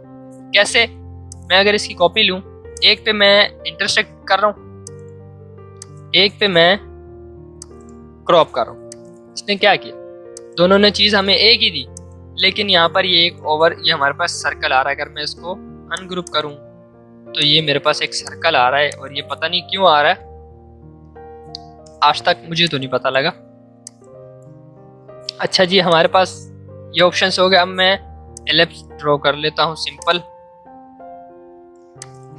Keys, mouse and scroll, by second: 0.0 ctrl+z, 1.2-11.9 alt+drag, 15.0 right click, 15.9 click, 20.5 ctrl+z, 25.8-27.3 drag, 27.3 l, 28.3 shift+click, 29.3 v, 30.0 alt+click, 31.0 alt+Caps_Lock, 31.9 click.